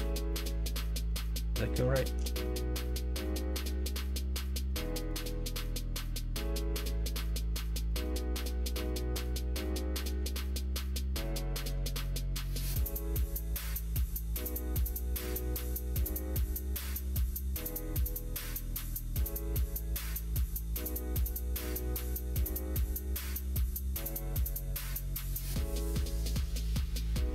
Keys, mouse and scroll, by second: 0.2 middle click, 1.0 Tab, 1.8 shift+middle click, 3.3 click, 3.8 alt+z, 5.2 shift+click, 5.4 middle click, 7.7 alt+click, 10.6 q, 11.6 Tab, 11.9 click, 12.6 alt+z, 13.2 middle click, 14.2 middle click, 18.5 middle click, 18.9 shift+middle click, 19.3 middle click, 19.8 shift+middle click, 20.2-21.4 middle drag, 21.7 shift+middle click, 22.9 shift+middle click, 23.2 Tab, 24.1 middle click, 24.8 shift+middle click, 25.3 middle click, 26.6 alt+z.